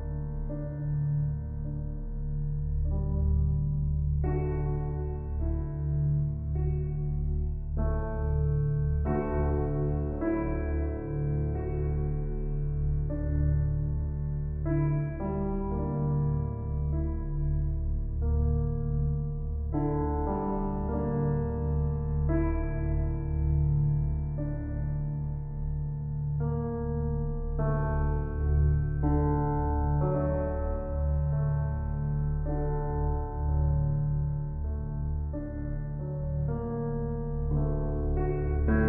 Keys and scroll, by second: 3.8 ctrl+t.